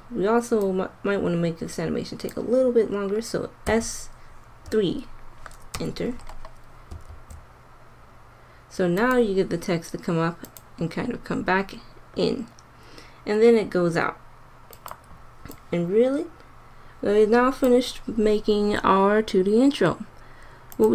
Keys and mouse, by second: 3.7 s, 7.1 alt+a, 9.0-10.1 drag, 14.5 click, 16.7 click, 16.9 click.